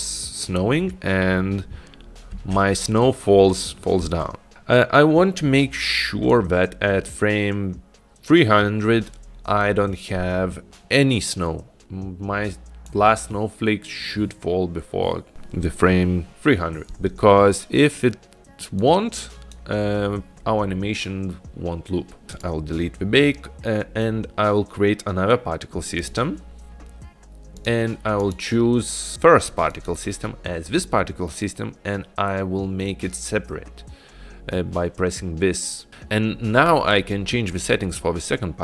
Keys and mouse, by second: 2.6 space, 4.2 space, 4.5 space, 6.6-13.0 drag, 19.1 click, 22.5 click, 26.1 click, 27.7 click, 28.3 click.